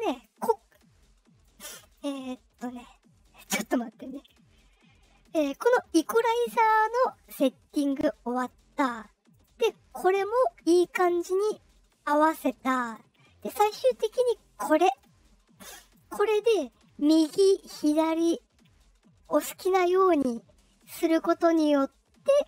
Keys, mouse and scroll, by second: 1.4-1.9 drag, 2.4 click, 3.3 click, 4.1 click, 8.2 click, 9.2 click, 12.8 click, 14.0 click, 14.9-15.9 drag, 16.6-22.4 drag.